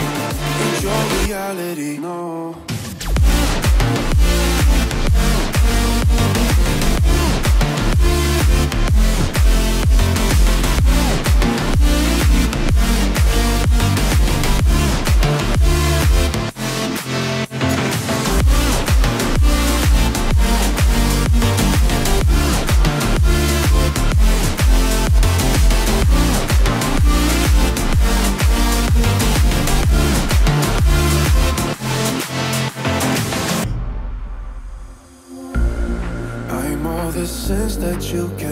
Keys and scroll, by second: 0.5 Down, 2.0 Down, 2.3 Down, 10.6 Down, 14.0 ctrl+z, 16.8 Down, 20.1 Down, 20.3 Down, 20.9 Down, 21.4 Right, 21.5 Right, 21.7 Right, 22.1 Down, 22.3 Down, 22.9 Right, 23.2 Right, 23.5 Right.